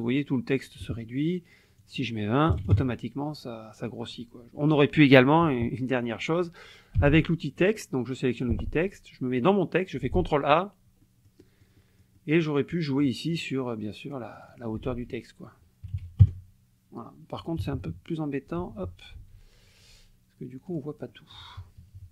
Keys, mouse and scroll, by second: 1.8 click, 2.5 KP_2, 2.6 KP_0, 2.7 KP_Enter, 7.0 t, 8.3 click, 9.4 click, 10.1 ctrl+a, 11.0-12.6 drag, 14.3 click, 14.9 ctrl+a, 15.9 KP_7, 16.0 KP_5, 16.2 KP_Enter, 17.6 KP_Subtract, 18.6 ctrl+z, 20.7 click, 21.1 click, 21.8 KP_Subtract.